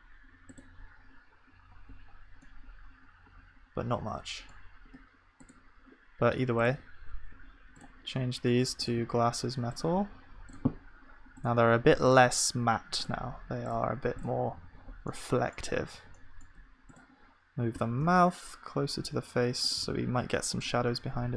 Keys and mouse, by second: 1.7 KP_Decimal, 14.6 ctrl+s, 17.8 g.